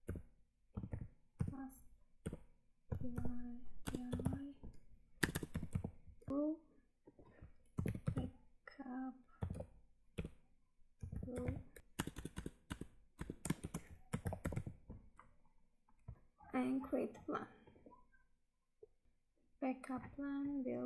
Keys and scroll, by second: 6.3 Tab, 11.8 Tab, 16.1 Tab, 19.0 Tab.